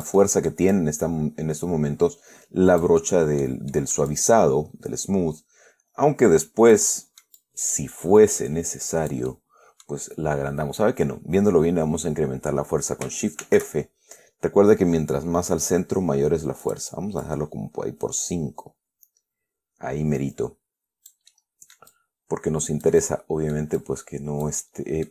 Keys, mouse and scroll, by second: 0.5-1.0 scroll down 1, 1.0-3.7 drag, 3.3 right click, 3.7 scroll up 1, 4.0 middle click, 4.4-10.3 drag, 4.4-10.3 right drag, 13.7 shift+f, 16.9 click, 17.5-21.6 drag, 21.6-24.0 middle drag, 22.2-24.0 drag, 24.1-25.1 drag, 24.9-25.1 middle drag.